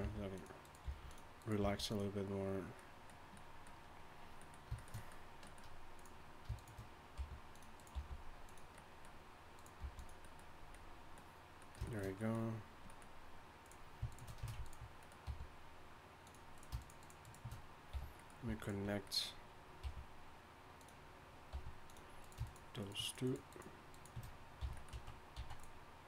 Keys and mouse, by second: 0.0 g, 0.8 g, 1.6 g, 5.9-7.2 drag, 7.2 g, 7.9 g, 9.8 g, 15.2 g, 17.9 f, 19.8 g, 21.5 r, 22.9 shift+right click, 24.6 shift+right click, 24.6 f, 25.3 z.